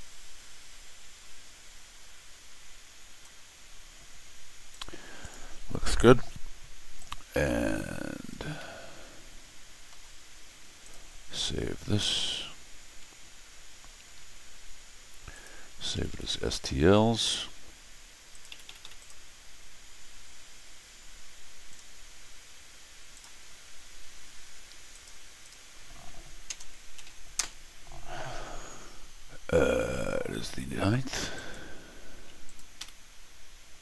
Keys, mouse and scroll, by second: 4.7 click, 5.2-7.0 drag, 7.4 middle click, 7.8 scroll up 1, 8.5-9.9 middle drag, 10.8 click, 12.0 s, 15.3 click, 15.7-16.6 typing, 18.3 click, 18.8 s, 18.9 click, 21.7 click, 23.1 click, 24.9 click, 25.4 click, 26.4 BackSpace, 26.9 9, 27.3 Return, 31.3 click, 32.4 click, 32.7 s.